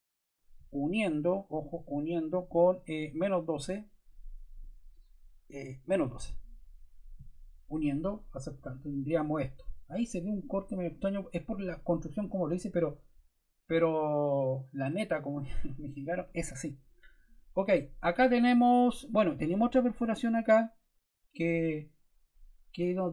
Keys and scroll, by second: 5.7-6.6 typing.